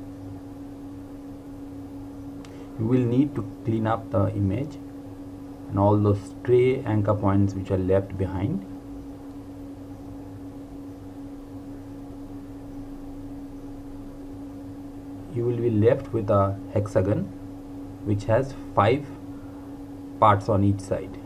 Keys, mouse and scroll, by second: 0.6 click, 0.8 Delete, 1.0 click, 1.2 Delete, 1.3 click, 1.5 Delete, 1.6 click, 1.9 Delete, 2.0 click, 2.3 Delete, 2.5 ctrl+z, 2.6 click, 3.3 Delete, 3.7 click, 4.1 Delete, 4.3 ctrl+z, 4.4 click, 4.8 Delete, 4.9 click, 5.0 Delete, 5.2 click, 5.2 Delete, 5.6 click, 6.2 Delete, 6.4 click, 7.1 Delete, 7.3 click, 7.5 Delete, 7.6 click, 7.7 Delete, 7.8 click, 8.2 Delete, 8.5 click, 9.0 Delete, 9.2 click, 9.2 Delete, 9.3 scroll down 1, 9.6 click, 10.7 Delete, 11.0 click, 11.3 Delete, 11.5 click, 11.6 Delete, 11.8 click, 11.9 Delete, 12.1 click, 12.5 Delete, 12.6 click, 12.8 Delete, 12.9 click, 13.1 Delete, 13.2 click, 13.5 Delete, 13.7 click, 13.9 Delete, 14.0 click, 14.1 Delete, 14.2 click, 14.5 Delete, 14.6 click, 14.7 Delete, 14.8 click, 15.0 Delete, 15.1 click, 15.3 Delete, 15.4 click, 16.1 Delete, 16.2 click, 16.4 Delete, 16.7 click, 17.6 Delete.